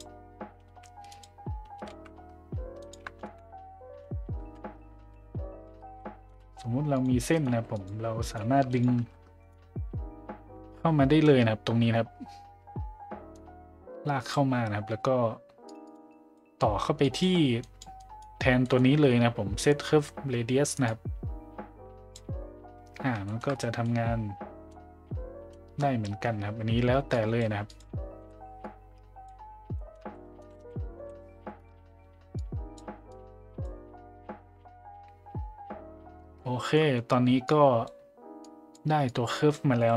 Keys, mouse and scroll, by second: 13.4 click, 15.7 click, 15.9 click, 16.1 click, 17.1 click, 17.6 click, 18.0 click, 18.7 middle click, 20.9-22.2 drag, 23.2 shift+middle drag, 23.8-24.7 middle drag, 25.5 middle drag, 27.1 drag, 27.7 click, 28.2 Delete, 28.6-29.3 drag, 29.7 middle drag, 31.0 Delete, 31.5-31.8 right drag, 32.3 click, 33.1 click, 36.8 middle click, 37.5 click, 38.5 click, 39.1 click.